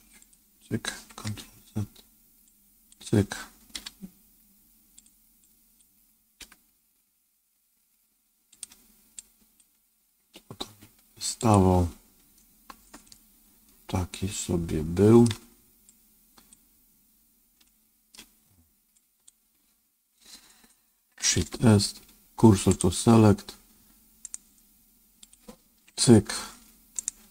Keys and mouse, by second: 0.1 click, 1.2 ctrl+z, 2.4 click, 3.7 g, 5.4 click, 6.3 g, 9.1 click, 9.6 g, 13.0-15.2 middle drag, 15.8 click, 17.6 middle click, 18.9 click, 21.3 shift+s, 24.3 right click, 25.1 click, 25.8 ctrl+Tab, 26.9-27.3 right drag.